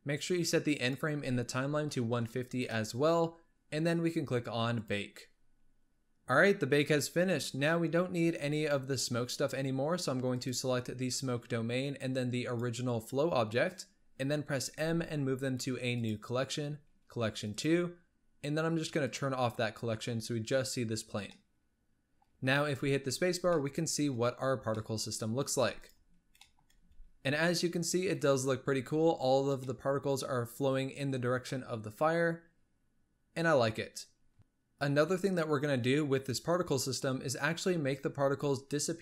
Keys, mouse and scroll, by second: 0.8-3.7 drag, 4.7-5.8 drag, 10.3 click, 12.5 shift+click, 14.7 m, 19.0 click, 21.3-22.3 middle drag, 22.3 scroll up 2, 22.6 space, 23.3 scroll down 1, 23.5-25.6 middle drag, 25.6 space, 25.8 drag, 26.5 middle click, 26.8 space, 28.6-29.7 scroll down 2, 28.7 space, 29.7-33.7 middle drag, 33.7-34.4 scroll up 2.